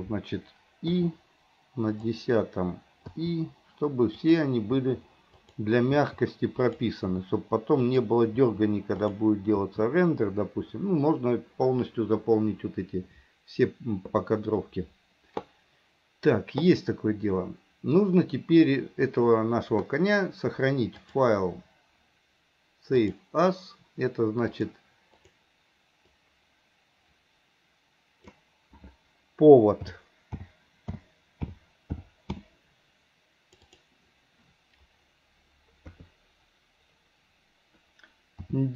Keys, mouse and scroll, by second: 1.0 i, 2.0 click, 3.2 i, 4.3 click, 4.8 i, 5.5 click, 6.0 i, 6.7 click, 7.2 i, 7.9 click, 9.1 click, 9.6 i, 21.1-23.4 drag, 35.9 KP_3.